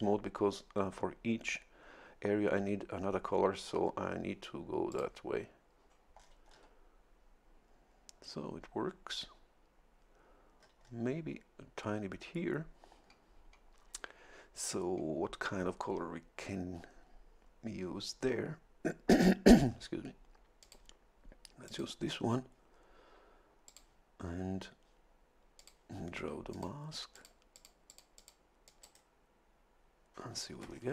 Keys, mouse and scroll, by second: 4.9 click, 6.2 scroll down 1, 10.6-11.2 scroll up 1, 20.6 click, 21.6 click, 23.7 click, 25.6 click, 26.5 click, 27.1 click, 27.5 click, 28.7 click, 30.7-30.9 shift+scroll up 2.